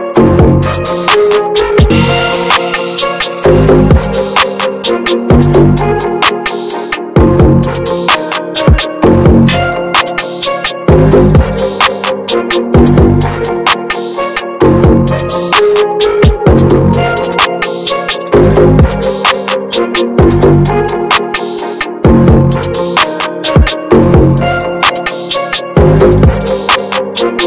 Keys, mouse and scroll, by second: 0.7 ctrl+z, 1.2-2.0 scroll down 1, 2.0-4.2 drag, 4.2 middle click, 4.9 ctrl+z, 5.3-5.9 scroll down 1, 5.9 middle click, 6.5-8.0 drag, 8.0-9.3 middle drag, 9.3 ctrl+z, 10.4-10.8 ctrl+scroll down 1, 11.1 middle click, 11.9-13.8 drag, 13.8-15.3 middle drag, 15.3 ctrl+z, 15.8 ctrl+scroll down 1, 16.3 middle click, 16.9-18.8 drag, 18.8 ctrl+z, 19.7 ctrl+scroll down 1, 21.1-24.0 drag, 24.1-25.4 middle drag, 25.4 ctrl+z, 26.2 ctrl+scroll down 1, 27.0 click.